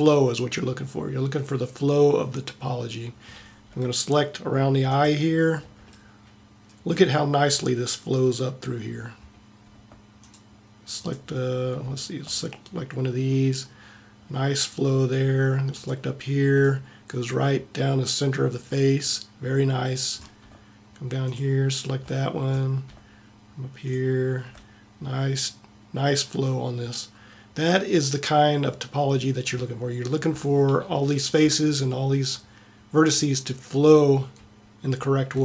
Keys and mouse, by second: 0.4 middle click, 1.5-5.0 middle drag, 15.8 middle click, 17.0 middle click, 18.3 middle click, 21.3-27.2 middle drag.